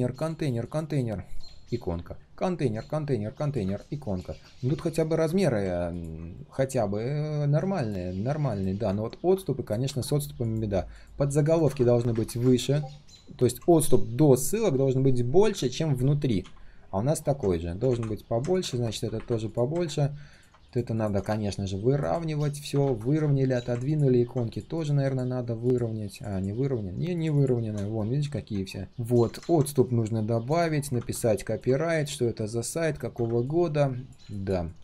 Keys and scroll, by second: 9.8 ctrl+z, 16.4 ctrl+z, 27.8 alt+h, 32.3 ctrl+z.